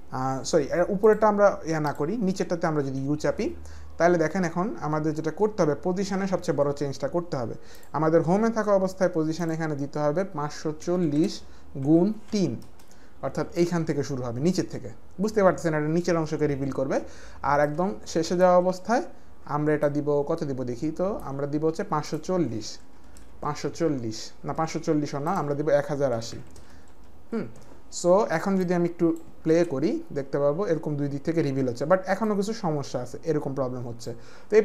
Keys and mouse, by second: 1.0 click, 1.8 click, 2.8 u, 7.7 click, 9.4 click, 10.8 KP_5, 11.0 KP_4, 11.2 KP_0, 11.8 KP_Multiply, 12.3 KP_3, 12.6 Return, 17.7 shift+click, 19.9 click, 22.0 click, 22.9 KP_5, 23.0 KP_4, 23.1 KP_0, 23.5 Return, 25.2 click, 26.1-27.1 typing, 26.9 Return, 26.9 click, 27.1 Return, 27.1 click, 28.6 click, 29.5 space, 32.2 click.